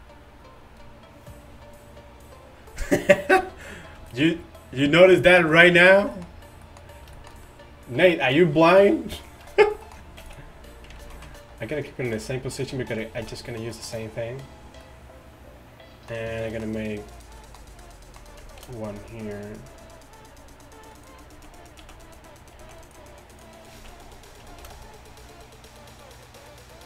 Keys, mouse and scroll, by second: 10.3 x, 11.2 ctrl+z, 12.7 z, 13.2 z, 18.7 d, 21.4 z, 21.9 z, 22.7 z, 23.8 z, 24.7 shift+d.